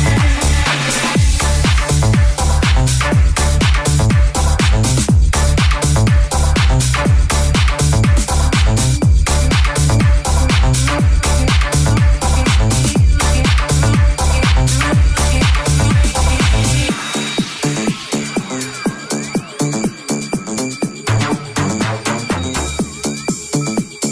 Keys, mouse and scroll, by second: 1.9 s, 3.0 e, 3.8 s, 9.3 right click, 9.7 right click, 9.7 middle click, 10.2 j, 10.4 right click, 10.5 shift+middle click, 10.9 right click, 10.9 middle click, 11.2 j, 11.4 right click, 11.4-13.5 middle drag, 12.1 g, 13.5 alt+right click, 13.6-15.3 alt+middle drag, 13.7 s, 15.3 right click, 15.4-16.6 middle drag, 16.6 right click, 16.7-18.7 middle drag, 18.7 right click, 18.8-20.1 shift+middle drag, 20.5-24.1 middle drag, 23.8 alt+z.